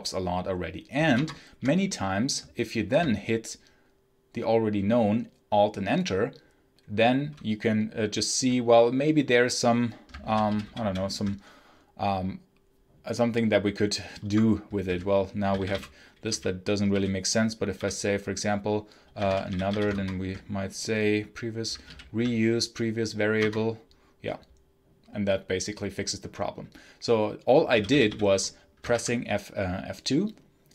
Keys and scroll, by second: 1.0 alt+Return, 10.1 Down, 10.4 Down, 10.5 Up, 14.1 Escape, 14.7-17.6 typing, 18.7-20.1 typing, 21.7 Down, 23.3 Return, 27.6 k, 28.8 F2.